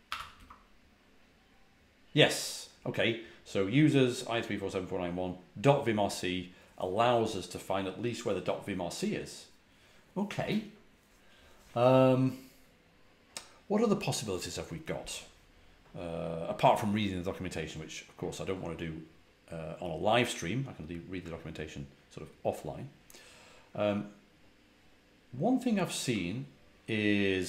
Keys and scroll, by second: 0.1 typing, 1.3 typing.